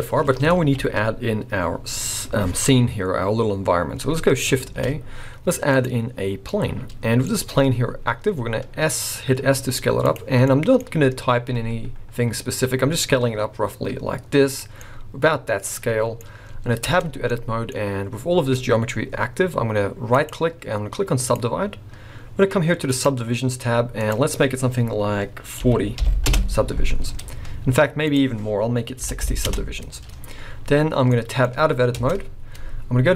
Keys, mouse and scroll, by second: 0.0-0.6 scroll up 2, 0.6 alt+a, 4.3 scroll up 3, 4.7 shift+a, 6.0-6.5 scroll down 5, 6.5 middle click, 7.3 scroll up 1, 7.8-8.3 scroll down 2, 8.3 s, 10.3 scroll down 2, 10.4 middle click, 10.8 scroll up 1, 11.5 s, 14.8 middle click, 16.9 Tab, 17.3 middle click, 17.8 scroll up 2, 18.6-20.0 scroll down 1, 20.1 right click, 22.9 click, 24.1 click, 28.2 click, 31.1 middle click, 31.5-32.0 scroll up 2, 32.0 Tab, 32.0-33.1 scroll up 3.